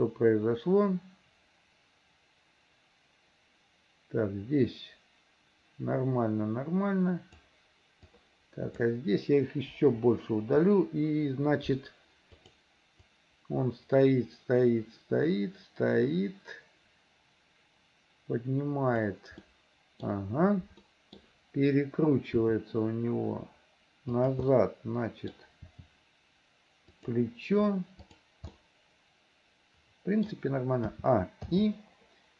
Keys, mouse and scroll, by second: 8.1 click, 9.8 Delete, 12.5 click, 13.2-19.2 drag, 19.5 middle click, 20.9 middle click, 22.5 r, 24.5 middle click, 25.6 r, 28.0 click, 28.5-30.3 middle drag, 31.0 a, 31.6 i.